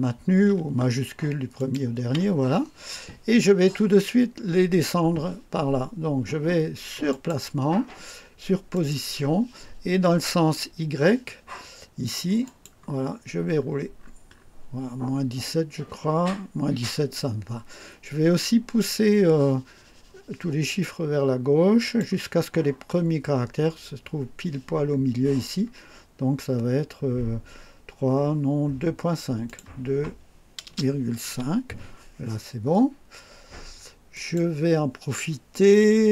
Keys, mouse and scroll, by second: 1.6 shift+click, 7.1 click, 8.7 click, 12.5 click, 13.2-14.6 scroll down 4, 15.0-15.5 scroll down 4, 21.8 click, 26.0-26.3 scroll down 2, 26.5 scroll down 2, 28.1 scroll up 2, 29.5 click, 30.7 BackSpace, 31.3 5, 34.1 click.